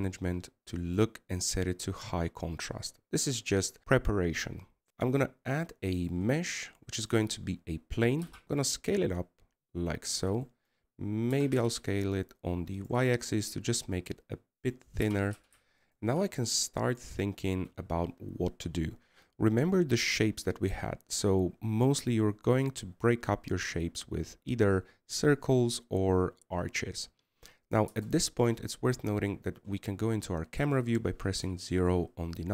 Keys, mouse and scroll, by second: 6.3 shift+a, 8.2-8.6 middle drag, 8.6 s, 12.2-13.1 middle drag, 13.1 s, 14.9-16.8 middle drag, 16.8 g, 18.2-21.3 middle drag, 29.7 KP_0, 32.4 right click.